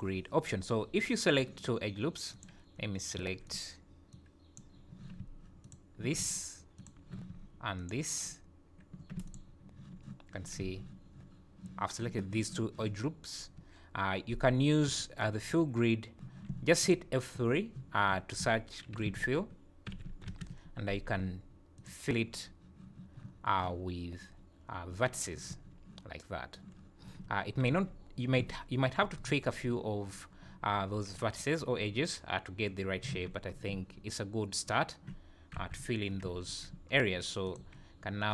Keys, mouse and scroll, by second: 2.3 click, 3.2 1, 3.4 click, 4.1 click, 5.6 ctrl+click, 6.7 shift+click, 7.8 ctrl+click, 9.3 shift+click, 10.5 z, 14.8 F3, 17.3 F3, 25.5 z, 27.3 Tab, 27.7 z, 28.4 z, 33.1 z, 33.5-34.1 scroll down 5, 33.7 z, 35.6 KP_1, 36.1 scroll up 2, 36.5 Tab, 36.9 scroll up 2, 37.5 click.